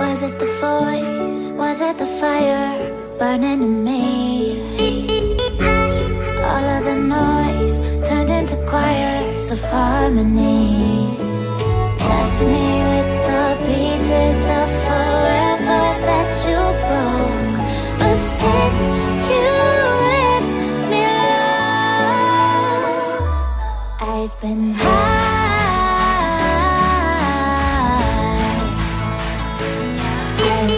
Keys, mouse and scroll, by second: 7.2 alt+scroll up 1, 10.3 alt+scroll down 1, 10.9 click, 11.4 alt+scroll down 1, 11.6 alt+scroll up 1, 19.2 Insert, 19.6 Right, 19.6 Right, 19.7 Right, 19.9 Right, 20.1 Right, 23.2 alt+scroll down 1, 23.4 alt+scroll up 1, 23.5 alt+scroll down 1, 23.6 alt+scroll up 1, 23.8-24.1 alt+scroll down 1, 24.1 alt+scroll up 1, 24.4 alt+scroll down 1, 24.8 alt+scroll up 1, 25.5 alt+scroll down 1.